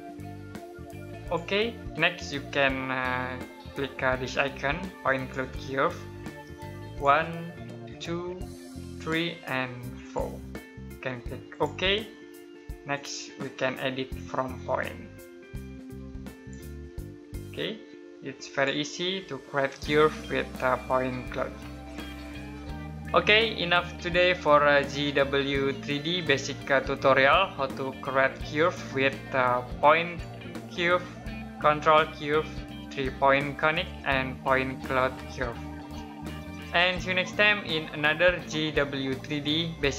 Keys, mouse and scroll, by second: 4.8 click, 29.8 click.